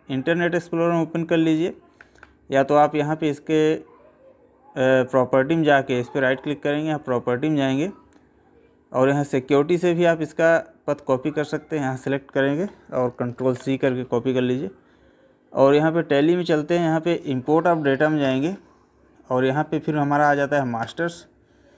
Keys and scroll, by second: 13.4 ctrl+c.